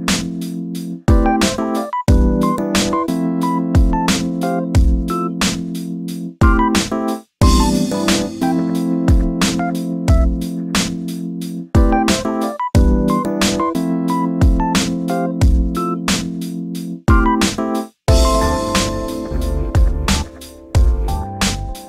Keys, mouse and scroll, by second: 0.0-0.5 scroll down 3, 0.5 click, 1.1 shift+a, 2.5 s, 5.0 alt+z, 5.5-6.3 scroll up 1, 6.3 1, 6.8 Tab, 7.1 1, 7.5 click, 8.3-8.9 shift+middle drag, 8.9 g, 11.0 click, 11.7 g, 13.6 click, 14.5 g, 17.1 click, 18.5 g.